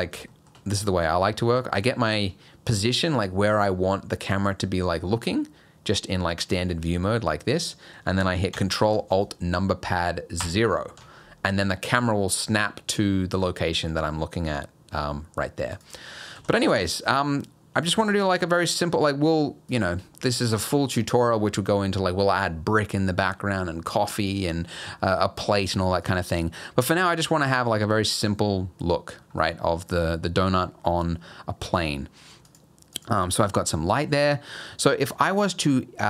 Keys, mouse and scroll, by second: 0.3 shift+middle click, 0.7 middle click, 2.0 shift+middle click, 2.5 scroll up 1, 6.2 middle click, 10.4 ctrl+alt+KP_0, 15.7 click, 16.3 g, 18.3 r, 26.0 click, 28.6 scroll down 2, 29.2 scroll down 3, 29.5-30.7 scroll up 4, 30.7 scroll down 2, 31.8 scroll down 2, 32.5 click, 32.9 click, 33.4-33.9 scroll up 4.